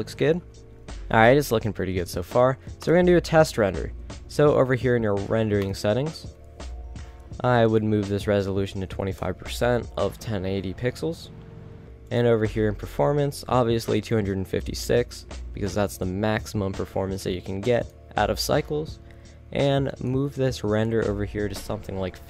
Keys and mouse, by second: 0.1 a, 0.3 a, 0.6 ctrl+s, 4.0 KP_0, 10.8 middle click, 11.6-13.3 middle drag, 13.3 click, 13.6-15.3 middle drag.